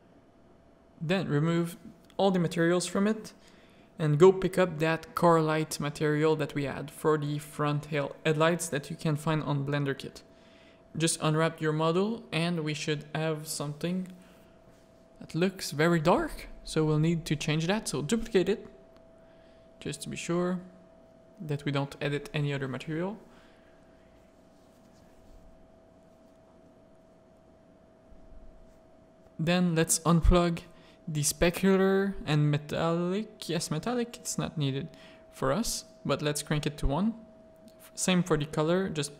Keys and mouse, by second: 1.7 click, 2.1-4.2 drag, 4.6 middle click, 6.0 Tab, 6.0 a, 7.1 click, 8.5 middle click, 9.1 Tab, 9.4 alt+a, 10.0-10.5 drag, 10.9 z, 14.5 click, 15.0 click, 21.3 click, 21.8-22.5 middle drag, 25.1-26.7 middle drag, 27.6 click, 29.5 click, 31.4-33.2 drag, 33.4-34.9 drag, 36.5-37.2 drag, 37.4 click, 38.5 middle click.